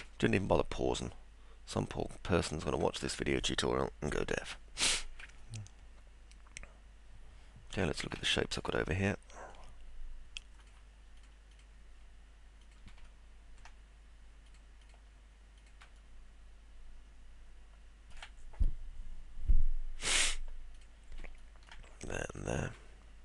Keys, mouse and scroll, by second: 0.0-2.6 alt+middle drag, 5.4-7.7 alt+middle drag, 7.9 middle click, 8.3 alt+middle click, 9.1 middle click, 11.5 ctrl+click, 12.6 ctrl+click, 13.0 alt+middle click, 14.4 ctrl+click, 14.8 ctrl+click, 16.0-18.1 alt+middle drag, 20.7 ctrl+click, 21.4 alt+middle click.